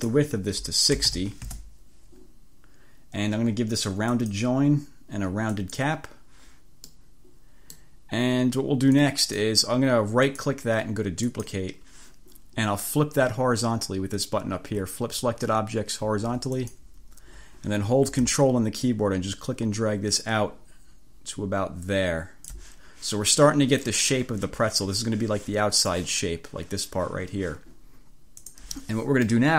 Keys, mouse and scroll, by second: 0.7-1.7 typing, 4.2 click, 5.6 click, 7.0 middle click, 7.4 click, 9.0 click, 10.4 click, 11.4 click, 16.6 click, 18.8-22.8 drag, 25.8 click, 28.4 click, 29.4-29.5 drag.